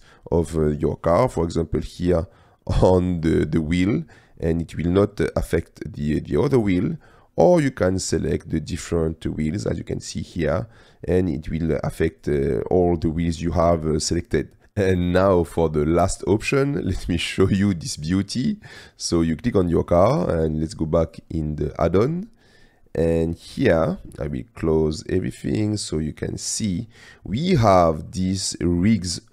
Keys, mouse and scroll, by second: 1.4-3.4 drag, 3.6-4.3 middle drag, 5.4-5.9 drag, 5.9-6.3 middle drag, 6.3-6.8 drag, 7.8-8.3 drag, 8.8 shift+click, 11.2-12.4 drag, 12.6-13.0 middle drag, 13.0 click, 13.4 middle click, 13.9-14.5 middle drag, 14.5 click, 15.0 click, 16.9 click, 17.9 click, 19.4 middle click, 20.2 n, 21.1 click, 24.3 click, 24.7 click, 25.4 click, 28.1 middle click.